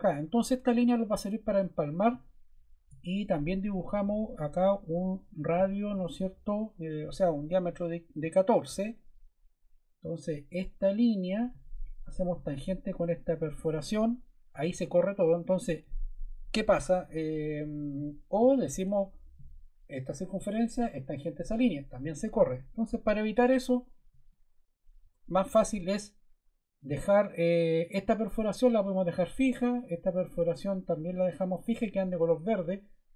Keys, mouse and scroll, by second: 0.5 ⟲, 7.5 1, 8.6 4, 8.8 Return, 16.5 super+z, 17.6 super+z, 23.0 super+z, 24.1 super+z, 25.0 scroll.